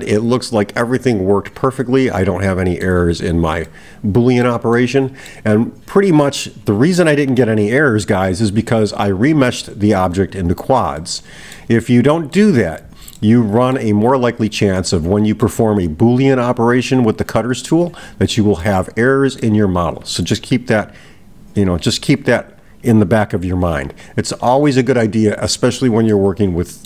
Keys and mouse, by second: 3.7-4.5 middle drag, 4.8-5.5 middle drag, 11.0-11.6 middle drag, 11.9-12.8 middle drag, 13.2-13.9 middle drag, 14.8-15.6 middle drag, 18.6-19.6 middle drag, 26.1-26.8 middle drag.